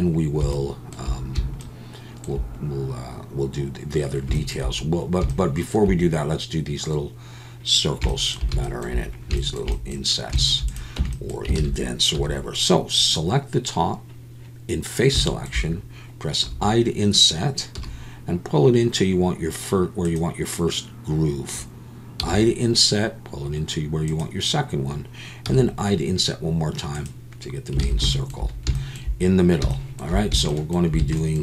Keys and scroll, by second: 11.0 Tab, 11.6 alt+a, 12.1 3, 27.8 alt+a.